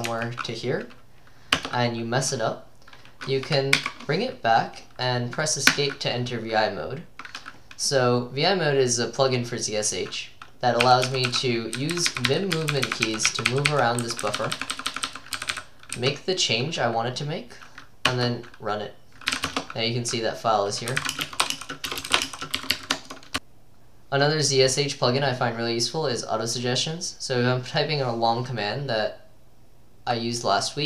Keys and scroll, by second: 0.0-0.6 typing, 1.6 Return, 3.8 Up, 5.8 Escape, 10.9-16.5 typing, 17.9-23.7 typing.